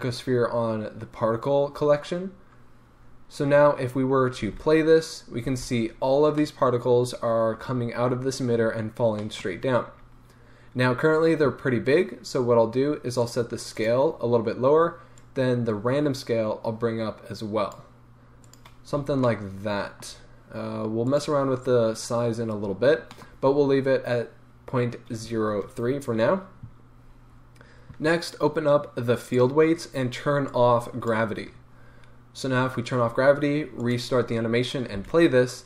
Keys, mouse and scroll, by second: 4.5 space, 5.5 space, 5.7-6.4 scroll up 2, 6.4-8.5 middle drag, 7.7-8.5 scroll down 2, 9.2 middle click, 9.6 scroll up 1, 10.6-13.2 middle drag, 13.2-14.5 drag, 15.1-18.7 drag, 18.9 scroll down 1, 19.0 a, 19.3-21.0 middle drag, 21.0-23.2 drag, 22.6-23.2 scroll up 2, 23.2-29.2 middle drag, 27.1-27.9 scroll down 2, 27.9-29.2 scroll down 1, 29.2 click, 30.4-34.2 drag, 34.8-35.5 scroll down 2, 34.9 space.